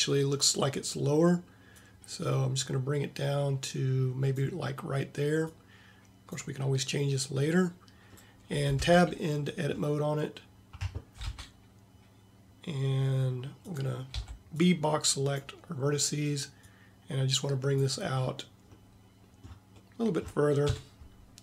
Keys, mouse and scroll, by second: 5.6-8.2 right drag, 11.3 Tab, 14.2 b, 20.8 KP_7.